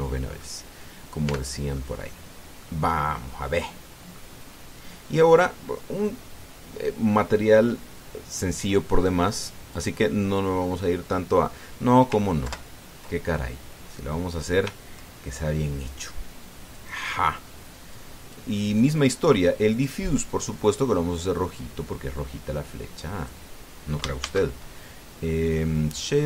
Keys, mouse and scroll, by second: 0.5 click, 2.0 Tab, 2.5 click, 2.6 right click, 3.7-5.1 middle drag, 5.2-5.5 scroll up 2, 5.7-6.0 scroll down 2, 9.1 click, 10.1 click, 10.5 click, 13.2 ctrl+Left, 14.8 scroll down 2, 17.5 click, 18.7 click, 19.5 click, 20.5 click, 21.4-24.3 drag, 25.0 shift+a.